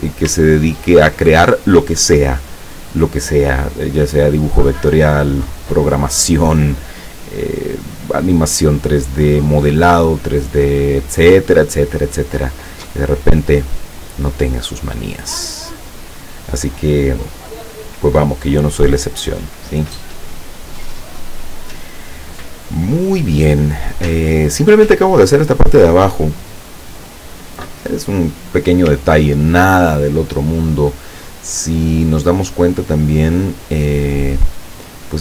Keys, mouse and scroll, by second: 0.7 ctrl+scroll down 1, 2.9 click, 8.2 click, 12.5 click, 14.3 click, 15.8 click, 29.3 ctrl+scroll down 2, 32.5-33.2 ctrl+scroll up 4, 33.5-34.2 ctrl+scroll down 2.